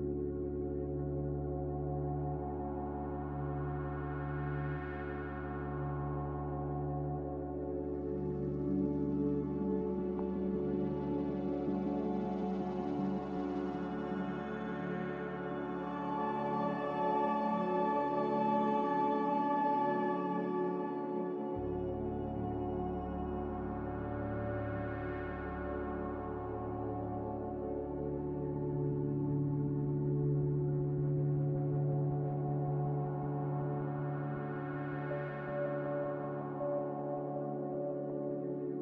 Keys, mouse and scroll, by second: 4.7 a, 18.5 z, 26.1 a.